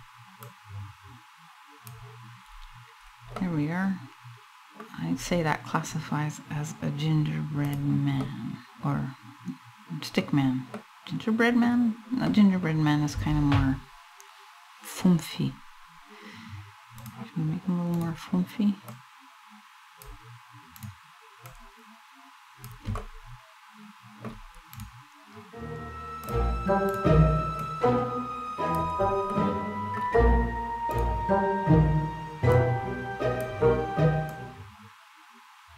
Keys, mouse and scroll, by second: 0.0 click, 2.0-3.0 scroll down 4, 3.0 middle click, 4.8 scroll up 1, 7.3 click, 7.9 middle click, 10.4 middle click, 11.4 scroll up 1, 11.9 middle click, 16.6 click, 17.6 right click, 18.6 click, 20.4 right click, 21.1 click, 22.7 middle click, 24.4 right click, 25.9 click, 26.5 right click, 27.2 click, 29.0 middle click, 30.7 right click, 32.2 click, 33.9 click.